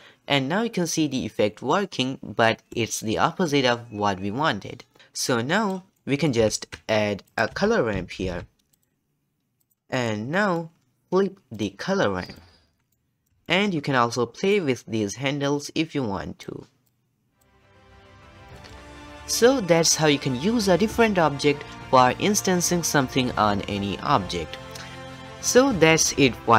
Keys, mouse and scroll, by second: 0.0 ctrl+v, 1.7-3.0 middle drag, 3.0 scroll up 1, 3.1-5.0 shift+middle drag, 5.3 click, 6.0 middle click, 6.5 shift+a, 8.2 o, 10.3-10.8 middle drag, 10.8-11.5 scroll up 1, 11.5-12.9 drag, 12.9-14.5 middle drag, 14.5-17.7 drag, 17.7-18.5 scroll down 6, 18.0 shift+middle click, 18.5 shift+middle click.